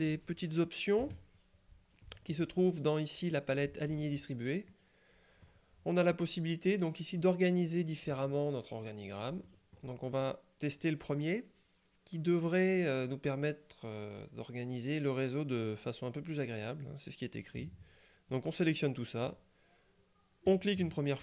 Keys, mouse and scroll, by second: 1.1 KP_Subtract, 2.1-2.9 middle drag, 4.0 click, 4.8-6.0 middle drag, 9.5-10.4 middle drag, 18.4-19.8 drag, 20.6 click.